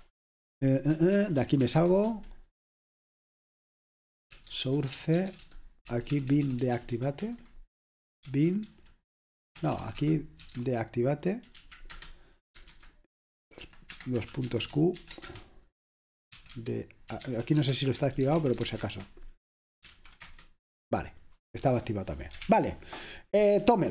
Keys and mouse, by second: 0.0 click, 1.0-2.3 typing, 4.2-7.2 typing, 8.3-11.0 typing, 11.6 Right, 12.0 Return, 12.7 super+h, 13.9 Escape, 14.3-21.9 typing, 22.5 ctrl+l.